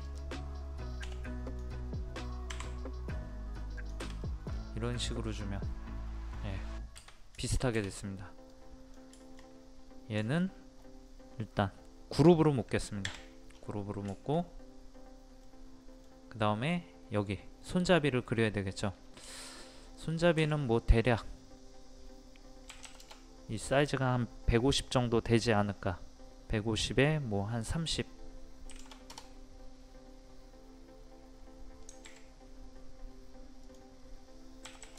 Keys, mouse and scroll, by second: 0.1 click, 2.5 Up, 3.8 click, 4.2 middle click, 4.5-4.8 scroll down 1, 5.2 middle click, 6.6-7.4 scroll down 1, 7.4 shift+middle click, 8.5 click, 9.2 shift+middle click, 9.8-10.2 scroll up 1, 10.3 shift+middle click, 13.1 a, 13.5-14.1 scroll down 1, 14.2-16.7 shift+middle drag, 18.9-19.3 scroll up 1, 19.3 shift+middle click, 20.4 r, 21.1 click, 22.7 KP_1, 33.6 click, 34.7 KP_1.